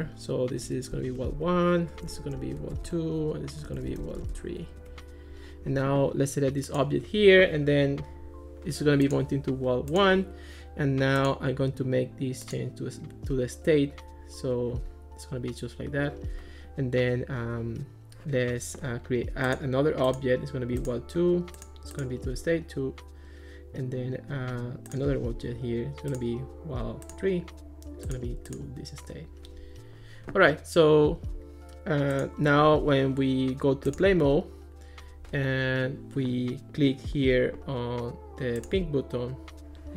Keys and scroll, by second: 0.0-5.1 typing, 1.1 Return.